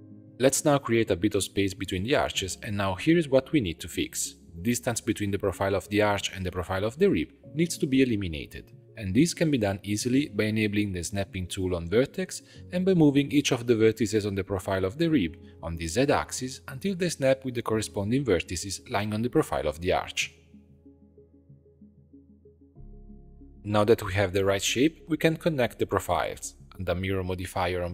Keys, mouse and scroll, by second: 0.1 click, 0.2-1.5 ctrl+shift+middle drag, 1.5 g, 3.0 middle click, 3.2 click, 3.7-9.2 shift+middle drag, 9.2 click, 9.5 Tab, 10.1 alt+a, 11.3-13.1 drag, 13.7 g, 15.2 click, 15.5 g, 16.7 click, 17.0 g, 18.2 click, 18.5 g, 19.8 click, 20.2 g, 21.2 Tab, 21.4 scroll down 2, 21.7-23.3 middle drag, 23.3 click, 24.0 shift+click, 24.4 f, 25.1 click, 25.6-26.5 typing, 27.0-27.9 drag.